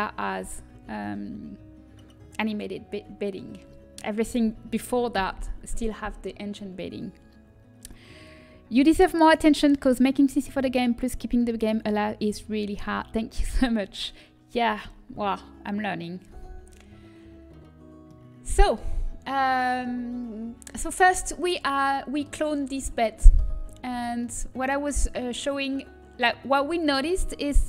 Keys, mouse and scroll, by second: 17.2-24.2 middle drag, 24.2 Tab.